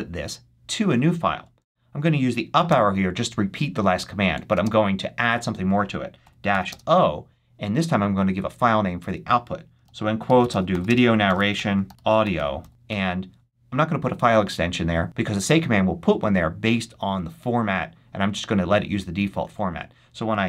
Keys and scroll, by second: 2.6 Up, 4.4 space, 6.1 -, 6.4 o, 6.6 space, 9.9-13.3 typing.